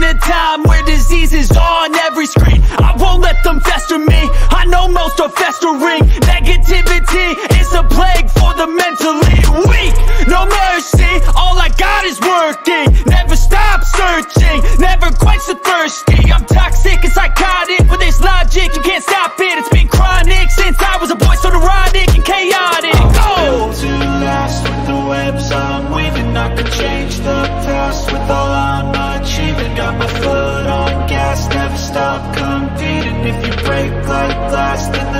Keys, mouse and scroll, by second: 0.0 click, 0.7-5.7 drag, 4.9 middle click, 6.5 middle click, 7.4 click, 7.4 middle click, 9.5 click, 9.6 click, 11.1 click, 11.3 click, 12.8-16.6 drag, 17.9-19.2 drag, 20.8-21.4 drag, 22.8 click, 23.3 click, 23.8 click, 24.2 click, 24.9 BackSpace, 25.8 click, 26.4 click, 29.0 click, 32.3-35.1 drag.